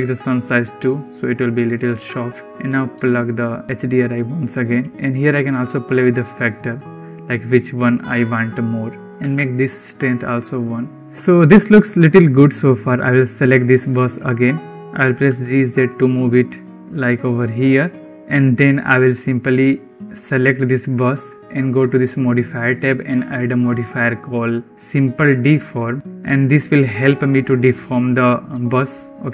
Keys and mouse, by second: 1.6 click, 2.1-3.6 drag, 4.4 click, 5.2 click, 6.1 click, 7.1 click, 7.4 click, 7.5 click, 8.0-9.4 drag, 11.0 ctrl+s, 13.4 click, 14.9 g, 18.2 ctrl+s, 20.0 click, 22.7-26.0 drag.